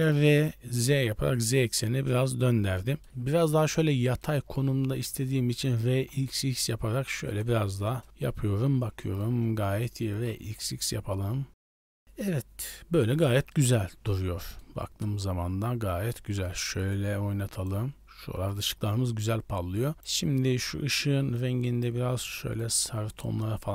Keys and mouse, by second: 2.0-3.1 middle drag, 3.8 middle click, 4.7 r, 5.7 r, 7.8 KP_0, 9.0 shift+middle click, 9.9 r, 13.6 middle drag, 14.0-14.5 middle drag, 15.1 KP_0, 16.3 shift+middle click, 17.0-17.7 drag, 19.9-21.4 middle drag.